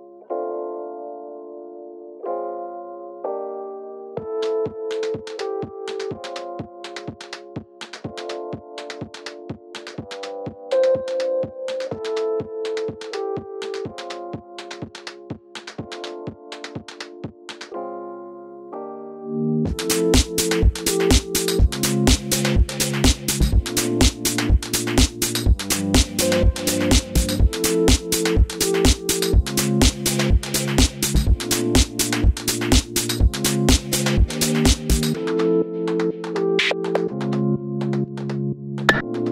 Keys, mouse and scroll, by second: 0.3 KP_Enter, 10.3 Escape, 24.4 g, 24.5 click, 36.5-38.6 right drag, 37.9-38.2 scroll down 1, 38.2-38.6 scroll up 1, 38.6 click.